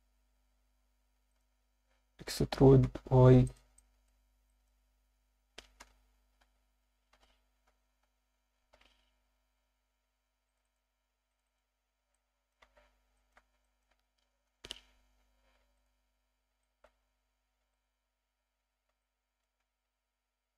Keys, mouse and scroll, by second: 0.1 s, 1.3 shift+click, 2.8 e, 2.8 y, 3.4 click, 3.8 alt+shift+middle click, 4.5 ctrl+alt+middle click, 5.8 ctrl+KP_Add, 6.4 s, 7.1 shift+y, 7.7 ., 8.0 8, 8.6 Return, 10.5 click, 10.6 click, 11.3 click, 11.4 click, 12.1 alt+middle click, 12.6 z, 13.1 alt+shift+middle click, 13.6 ctrl+alt+middle click, 15.1-15.7 scroll down 2, 15.1 KP_7, 15.7 ctrl+right click, 16.6 alt+shift+middle click, 17.7 ctrl+right click, 18.6-19.0 scroll down 2, 18.7 Tab, 19.0 middle click, 19.6 scroll up 1, 19.8 Tab.